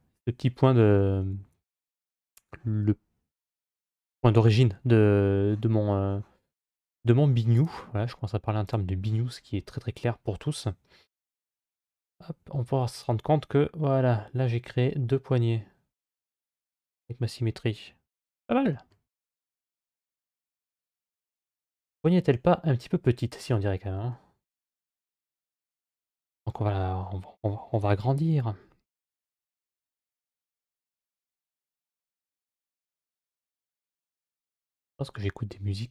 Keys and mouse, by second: 0.9 ctrl+z, 6.6 Tab, 8.5 click, 9.9 middle click, 11.1 g, 18.1-18.5 middle drag, 18.9-19.6 middle drag, 20.1-21.1 middle drag, 23.9-26.3 middle drag, 27.5 Tab, 33.1-34.1 drag, 35.7 click.